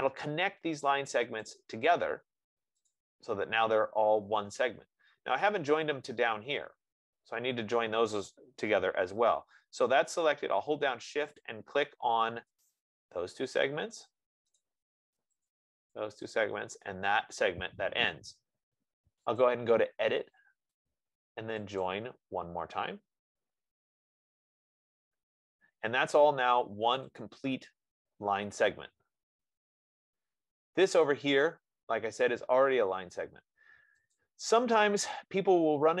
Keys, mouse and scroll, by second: 0.2 click, 5.4-5.9 scroll, 5.9 scroll, 6.6-7.8 scroll, 7.8 scroll, 11.8 click, 12.9 click, 14.9 click, 15.7 click, 16.6 click, 23.3 click, 25.5-26.1 scroll, 26.1-26.5 scroll, 26.5 click, 27.5 click, 30.8 F15, 31.4 click, 34.5 click.